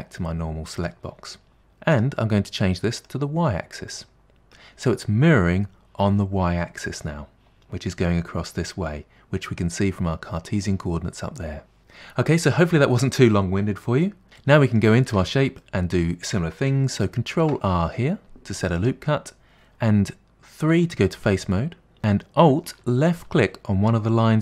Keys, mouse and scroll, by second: 2.0 click, 3.0 click, 3.9-6.9 middle drag, 14.4 middle click, 15.1 Tab, 15.6-17.3 middle drag, 17.3 ctrl+r, 20.7 3.